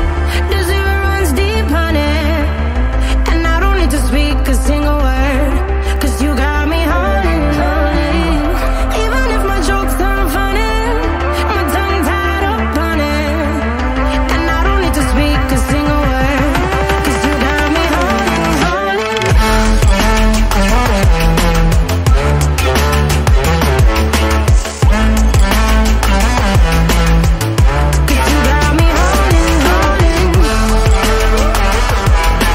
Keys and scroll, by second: 2.5 ctrl+alt+z, 7.7 ctrl+alt+z.